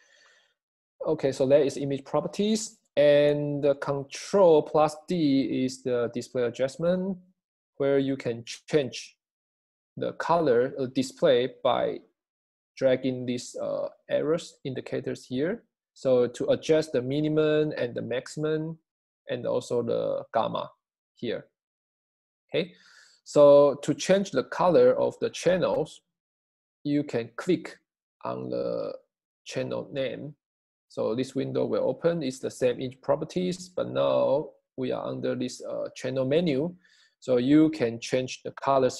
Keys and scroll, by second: 3.4 super+d.